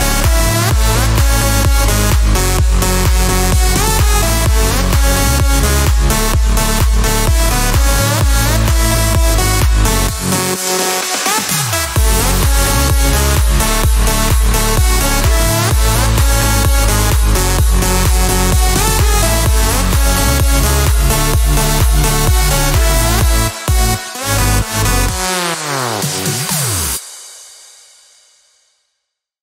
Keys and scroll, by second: 4.4-6.2 typing.